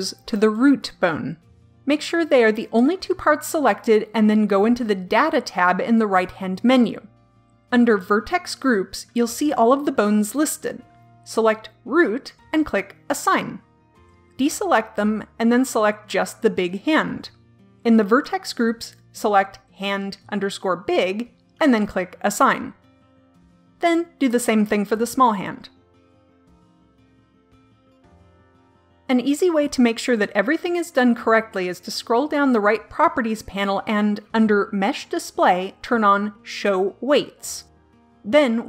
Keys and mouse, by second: 0.3 l, 6.2-14.0 drag, 15.1 a, 16.8 l, 19.4 click, 23.3 a, 24.7 l, 29.3 click, 30.4 click, 30.6-32.0 middle drag, 32.0-38.0 drag.